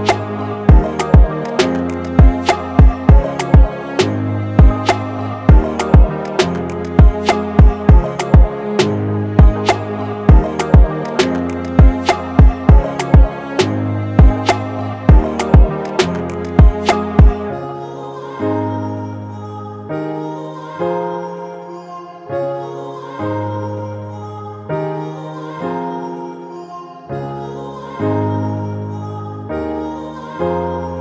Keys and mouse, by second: 6.3 space, 7.8-8.4 drag, 17.2 BackSpace, 20.6-23.6 drag, 24.9-29.2 drag, 29.3-31.0 drag.